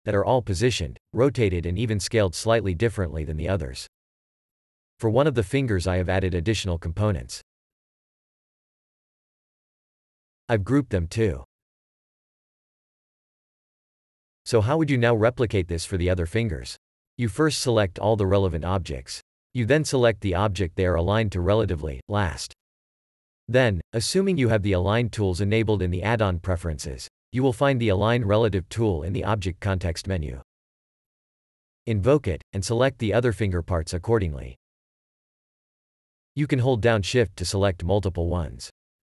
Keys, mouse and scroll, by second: 0.5 click, 3.8 a, 4.1-5.4 scroll up 3, 5.8 click, 6.4 g, 7.1 Escape, 7.8 click, 8.1 g, 8.4 Escape, 9.5-10.3 scroll up 2, 10.3 scroll up 1, 10.3 click, 10.6 g, 11.3 Escape, 11.9 a, 12.3 shift+click, 12.4 shift+click, 12.5 scroll up 2, 12.7 scroll down 2, 13.5 g, 14.0 Escape, 14.8 scroll down 1, 21.5 shift+click, 31.1 w.